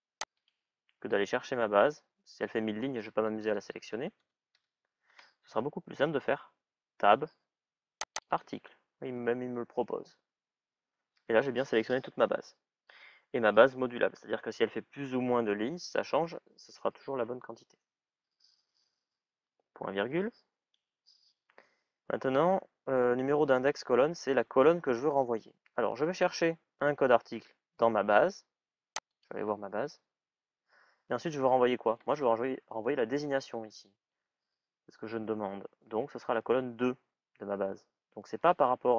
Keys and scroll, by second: 2.8 typing, 6.0 shift+t.